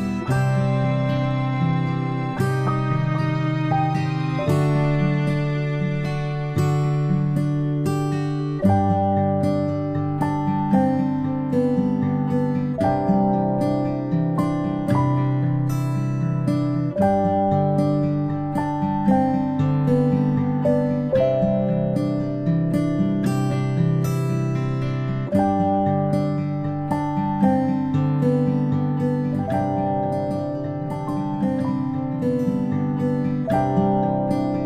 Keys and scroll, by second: 12.3 ctrl+shift+Up, 14.6 p, 29.5 ctrl+Delete.